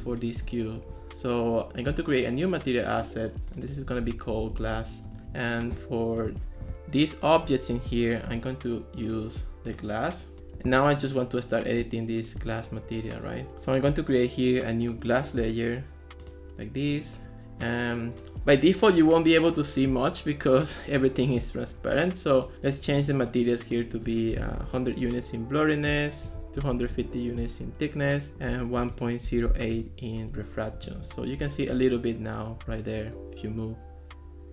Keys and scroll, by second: 4.1-5.2 typing, 13.5 super+z, 24.1-25.0 typing, 26.4-30.0 typing.